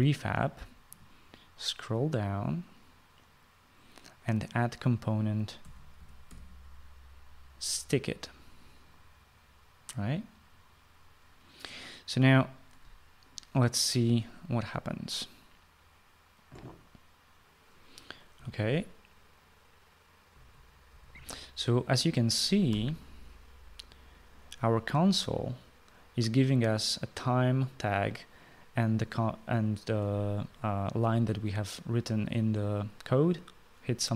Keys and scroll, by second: 6.1-7.5 typing, 19.5 typing, 21.0-21.9 typing, 23.4 Escape.